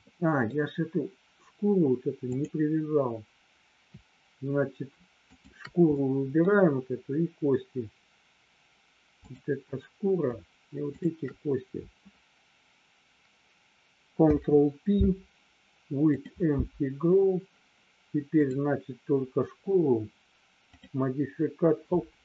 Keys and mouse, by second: 0.1 middle click, 2.4 click, 5.5 shift+click, 6.0 middle click, 9.2 click, 11.0 shift+click, 14.2 ctrl+p, 18.5 click.